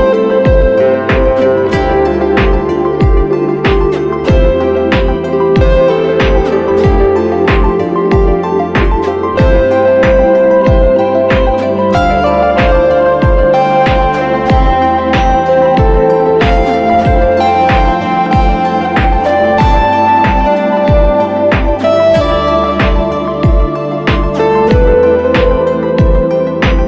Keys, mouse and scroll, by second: 21.1 alt+right click, 26.2-26.6 typing.